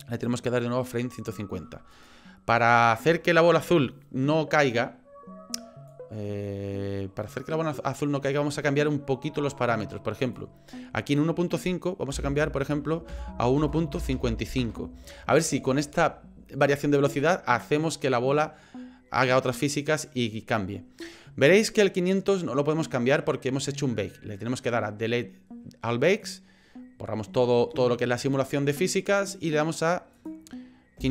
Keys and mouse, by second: 1.9 click, 5.9-8.0 drag, 10.4-18.8 drag, 14.1 KP_5, 26.2 click, 29.8 click, 30.2-31.1 drag.